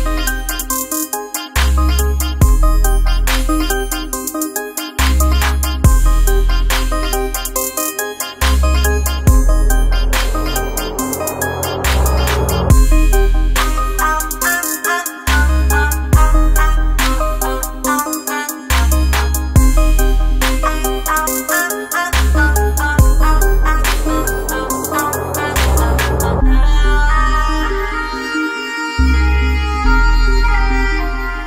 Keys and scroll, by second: 10.6 ctrl+0, 17.3 ctrl+z.